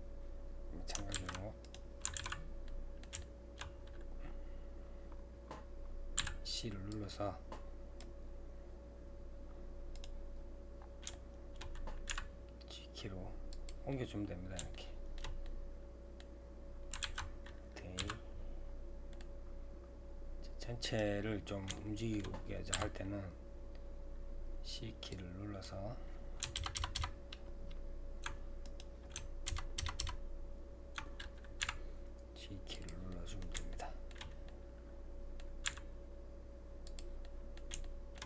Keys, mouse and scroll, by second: 2.2 alt+a, 2.7-4.2 middle drag, 4.2-4.7 scroll down 2, 4.7-5.1 scroll up 2, 5.5-6.2 scroll up 8, 6.2 c, 10.3 scroll down 2, 11.1 shift+middle click, 12.1 g, 13.9-17.0 middle drag, 17.0 alt+a, 18.0 c, 21.3-21.8 scroll down 2, 21.8 shift+middle click, 22.7 c, 29.5 ctrl+KP_Add, 29.8 ctrl+KP_Add, 31.6 g, 33.1-35.7 middle drag, 35.7 g, 37.2-38.2 middle drag.